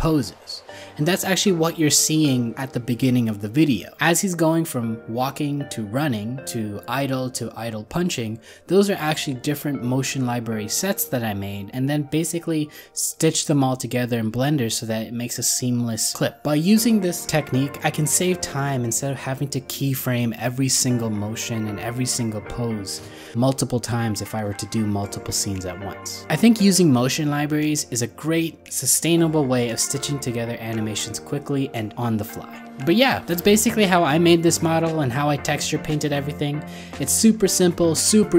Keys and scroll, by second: 0.3 ctrl+z, 1.1 ctrl+z, 1.4 ctrl+z, 2.9 ctrl+z, 21.8 alt+z, 27.1 ctrl+z, 28.7 ctrl+z, 31.0 ctrl+z.